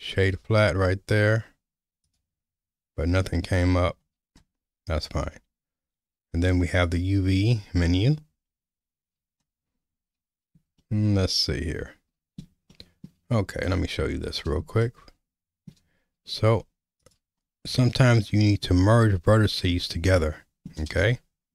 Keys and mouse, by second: 2.0-3.8 drag, 7.0 click, 10.8-12.4 shift+middle drag, 12.7 middle click, 13.7 Tab, 14.9 shift+middle click, 17.0 click, 20.2 middle click, 21.0 shift+middle click.